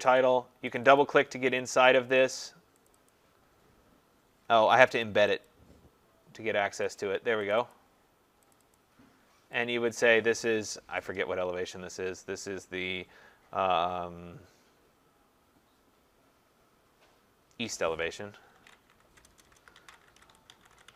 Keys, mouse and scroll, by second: 0.2 click, 0.8 click, 1.0 click, 1.9 click, 2.1 click, 2.9 click, 3.1 click, 5.5 click, 7.0 click, 7.8 click, 8.6 click, 8.8 click, 10.0 click, 11.4-13.8 scroll, 17.6 middle click, 18.3-20.9 typing.